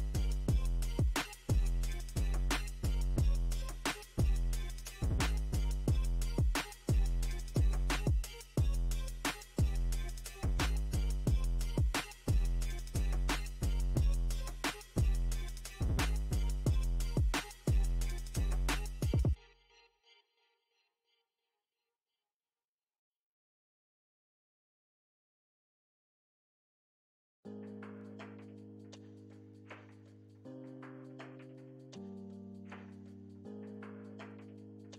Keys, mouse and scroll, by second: 0.2 middle click, 1.1 click, 4.1-7.9 middle drag, 7.9 space, 8.3-9.8 middle drag, 9.8 alt+m, 11.7 ctrl+r, 12.4 middle click, 13.1-14.4 drag, 14.4 middle click, 14.9 click, 15.4 middle click, 15.7 click, 16.3 middle click, 16.7 click, 17.2 middle click, 17.7-19.3 drag, 19.3 middle click, 20.0 click, 20.8 middle click, 21.2 ctrl+click, 22.0-25.2 middle drag, 25.2 shift+c, 26.3 f, 27.6 f, 28.4-29.6 ctrl+drag, 29.6 middle click, 30.2 f, 30.8 middle click, 31.5 ctrl+click, 32.0-34.1 middle drag, 34.1-34.9 ctrl+drag.